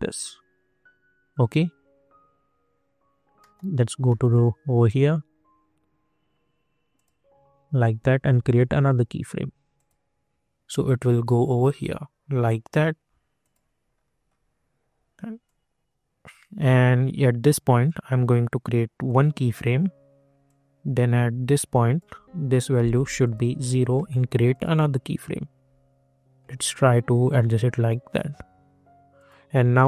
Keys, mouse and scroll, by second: 3.3 middle click, 4.5-5.0 scroll down 2, 6.9 click, 13.4 click, 13.8 scroll down 1, 15.4-23.2 drag, 23.6 Return, 24.5 click, 27.1-29.1 drag, 29.8 middle click.